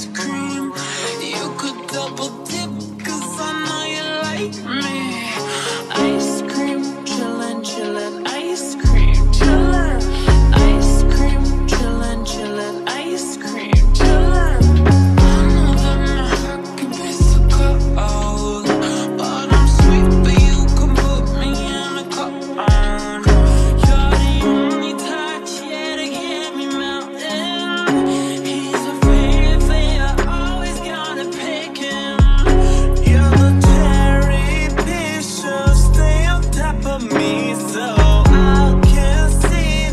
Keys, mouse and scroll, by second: 12.2-15.1 typing, 20.7 F9.